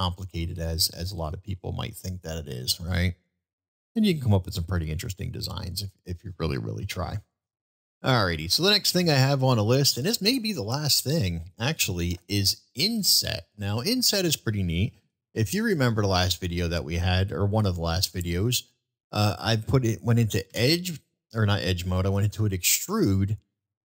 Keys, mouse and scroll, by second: 2.8-3.8 middle drag, 5.0 ctrl+z, 13.6-14.0 middle drag, 16.3-17.6 middle drag, 18.0-18.3 shift+middle drag, 18.7 shift+middle click.